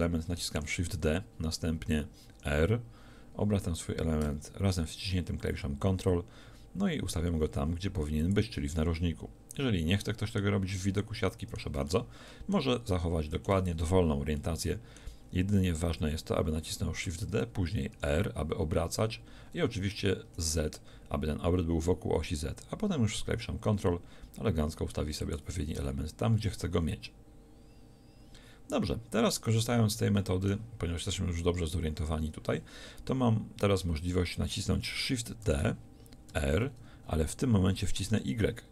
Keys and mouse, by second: 0.6 shift+d, 8.4-10.6 drag, 10.6 z, 17.1 shift+d, 35.5 shift+d.